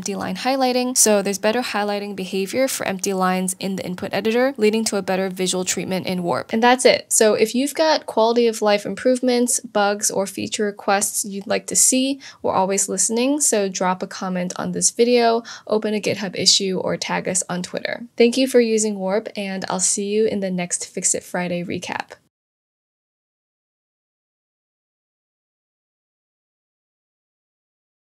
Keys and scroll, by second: 0.1 shift+Return.